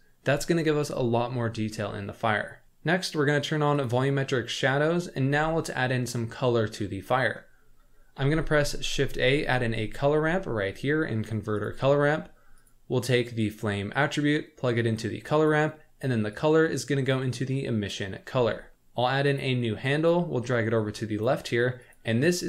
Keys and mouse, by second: 3.8 click, 8.2 shift+a, 13.5-15.5 drag, 16.3-17.9 drag, 19.4 click, 20.0-21.3 drag.